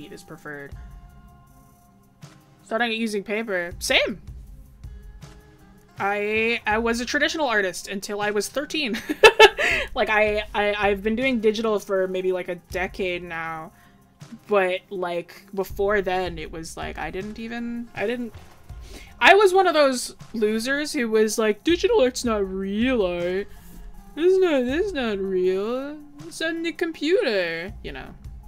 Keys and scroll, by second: 28.1 ctrl+z.